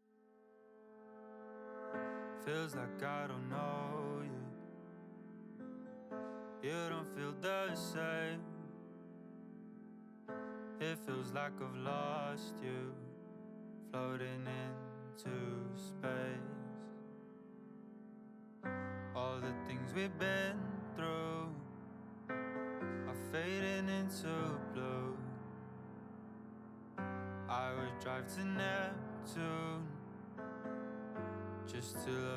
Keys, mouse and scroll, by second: 0.1 middle click, 0.5 alt+z, 0.8 click, 1.2 alt+z, 1.5 click, 1.9 click, 2.2 alt+z, 2.5-3.7 middle drag, 3.7 g, 4.5-5.0 middle drag, 5.0 click, 5.3 g, 6.1-7.0 middle drag, 7.0 scroll down 2, 7.3 click, 7.7 Tab, 7.8-8.4 middle drag, 8.4-9.2 scroll down 1, 9.2-10.3 drag, 11.2-12.5 middle drag, 12.6 KP_1, 12.9-13.2 scroll up 3, 13.2 click, 13.7 Tab, 14.0 a, 14.5 g, 17.2 middle click, 17.7 scroll down 4, 17.8 shift+middle click, 18.0-18.6 scroll up 1, 18.6 s, 20.2 click, 20.4 Tab, 20.6 click, 20.8-21.7 middle drag, 21.7-22.1 scroll up 4, 22.1 click, 22.5 click, 23.1-23.8 drag, 24.5 x, 25.2-26.0 middle drag, 26.0 ctrl+z, 26.5 click, 26.9 scroll down 4, 27.1-27.8 middle drag, 27.8 click, 28.1 click, 28.4 click, 28.8 Tab, 29.2 KP_1, 29.6 middle click, 29.9 a, 30.0-31.2 middle drag, 31.2 KP_1, 31.4 shift+middle drag, 31.7 scroll up 3, 32.1 middle click.